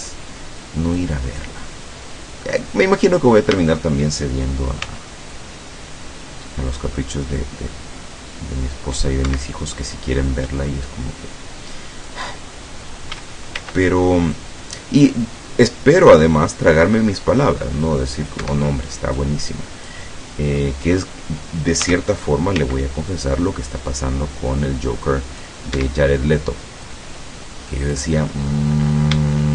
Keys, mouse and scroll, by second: 1.0-2.8 drag, 3.6 a, 4.9 c, 5.4-9.3 drag, 9.3 Escape, 10.9-12.3 drag, 13.2 a, 13.6 c, 14.4-18.6 drag, 18.4 Escape, 19.2 click, 20.2 middle click, 21.9 a, 22.7 c, 23.2-25.7 drag, 25.8 Escape, 26.9-28.2 drag, 28.5 middle click, 29.4 shift+middle click.